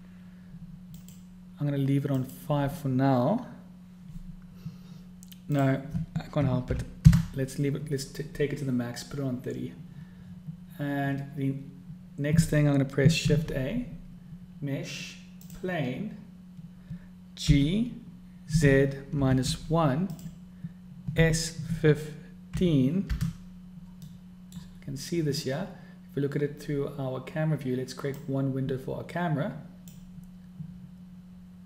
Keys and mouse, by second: 1.8-3.0 drag, 6.2-8.7 drag, 13.9 shift+a, 18.2 g, 21.9 s, 24.8 click, 29.0-30.8 middle drag.